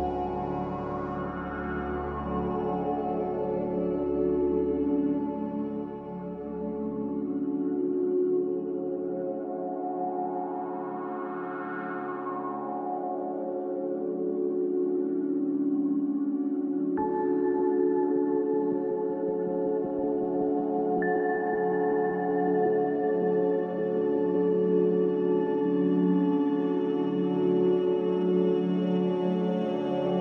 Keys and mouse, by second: 1.3 g, 3.2 shift+click, 4.1 g, 6.2 click, 7.9 g, 11.9 `, 13.3-15.2 middle drag, 16.2 drag, 17.8 click, 18.9 shift+click, 19.7 shift+click, 20.3 s, 23.7 middle click, 24.9 click, 25.9-27.1 drag, 25.9 middle click, 25.9-27.1 right drag, 29.4 ctrl+z, 29.7 ctrl+z, 29.9 ctrl+z.